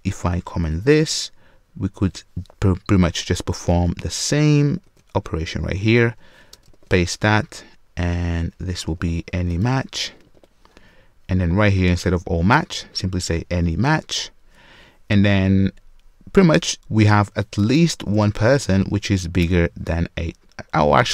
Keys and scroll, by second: 0.9 super+/, 4.8 super+c, 6.7 super+v, 14.1 Return, 19.4 Return.